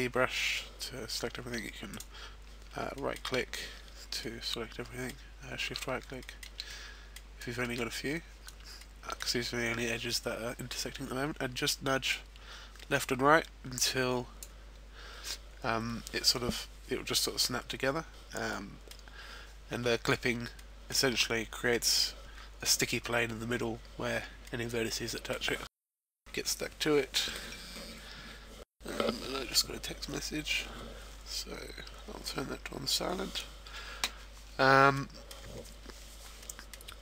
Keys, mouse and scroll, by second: 1.9 right click, 2.7-3.5 shift+scroll up 1, 3.5 shift+middle click, 3.5-4.2 shift+scroll down 1, 4.2 middle click, 6.2 shift+middle click, 6.7 middle click, 7.6 shift+middle click, 8.7 shift+middle click, 12.1 click, 17.6-18.1 scroll up 1, 18.1 scroll down 1, 18.4 middle click, 19.1-20.0 scroll up 2, 20.5 middle click, 23.1-24.4 scroll down 2, 24.4 middle click, 34.9 middle click, 36.4 middle click, 36.9-37.0 scroll down 1.